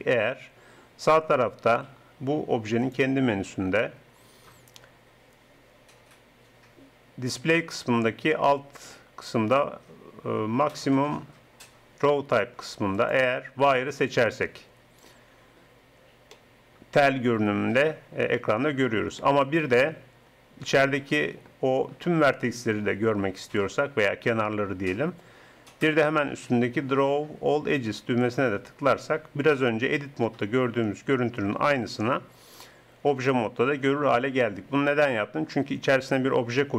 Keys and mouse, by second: 2.8-14.8 drag, 16.3-18.4 middle drag, 20.0-26.2 drag, 28.3-30.1 drag.